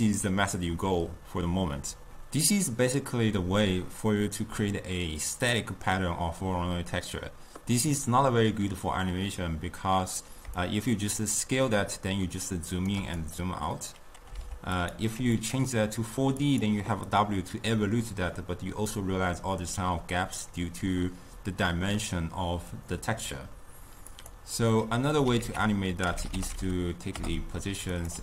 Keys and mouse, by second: 10.7-15.0 shift+drag, 15.5-18.9 drag, 22.8-24.8 drag, 24.8 middle click, 25.5 ctrl+a.